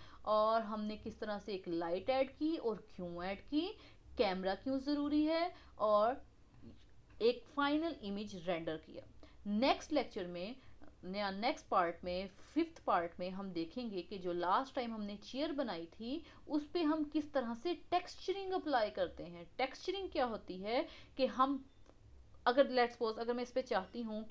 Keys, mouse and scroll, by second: 0.7 scroll up 1, 1.2 scroll down 4, 3.5-6.0 middle drag, 6.0 scroll up 2, 6.5-9.6 middle drag, 10.4-13.2 scroll up 1, 13.2-14.8 scroll up 1, 15.4-16.7 middle drag, 16.7-19.8 scroll up 1, 22.6 middle click, 23.1 scroll up 2, 23.6-24.3 middle drag.